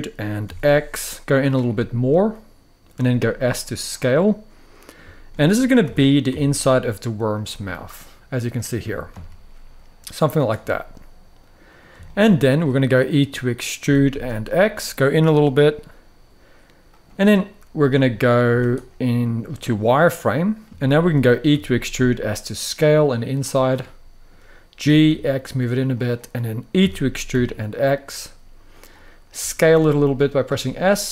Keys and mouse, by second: 0.1 x, 1.1 click, 1.4-2.6 middle drag, 2.7 s, 3.6 click, 3.9-4.6 middle drag, 4.8 shift+middle click, 5.5 g, 6.0 x, 7.0 click, 7.3-8.2 middle drag, 8.6 g, 8.9 x, 10.1-10.4 drag, 10.4-11.5 middle drag, 11.8 shift+middle click, 12.3 middle click, 13.5 e, 13.8 x, 16.6 click, 17.5 middle click, 18.2 z, 18.8-20.3 middle drag, 20.5-20.8 shift+middle drag, 21.2 e, 21.7 s, 23.0 click, 23.5 middle click, 24.5 g, 24.8 x, 25.6 click, 26.5 e, 27.0 x, 28.4 click, 29.1 s, 30.1 click, 30.3-30.8 middle drag.